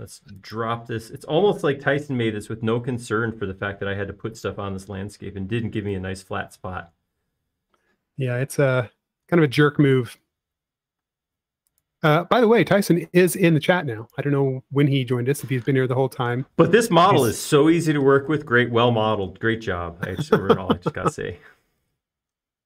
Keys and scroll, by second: 2.9 Up, 7.4 space, 12.2 space, 13.4 m, 17.1 space.